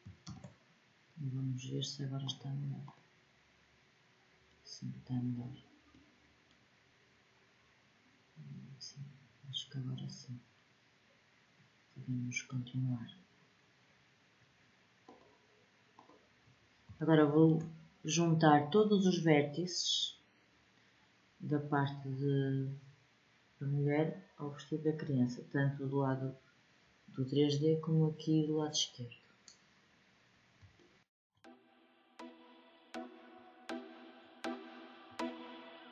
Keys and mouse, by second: 0.0 ctrl+j, 3.8-7.7 middle drag, 8.2-11.0 middle drag, 11.1 middle click, 11.3-13.1 drag, 16.1 middle click, 17.1-23.7 middle drag, 31.4 click, 32.2 w, 33.6 click, 34.1 w, 35.3 click.